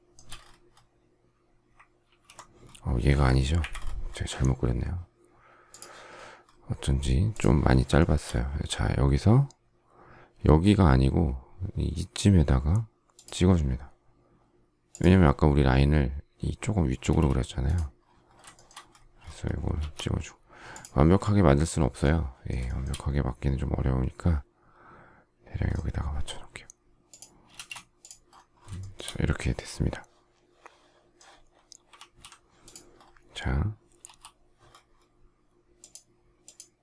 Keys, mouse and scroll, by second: 3.5 Delete, 7.9 shift+middle click, 17.0 space, 18.5 shift+middle click, 19.7 m, 22.6 shift+middle click, 27.5 space, 28.7 shift+middle click, 31.9 alt+f, 34.0 h.